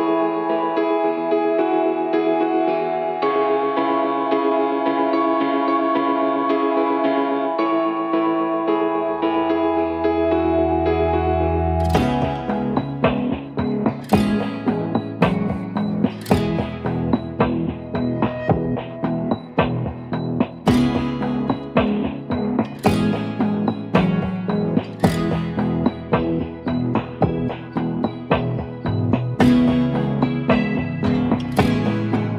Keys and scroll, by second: 1.3 0, 1.5 Return, 2.4 v, 3.4 ctrl+t, 7.1 Return, 9.3 Return, 11.2 v, 12.2 ctrl+j, 15.3-17.6 typing, 19.8-20.9 typing, 21.7 ctrl+t, 23.8 Return, 28.0 ctrl+d.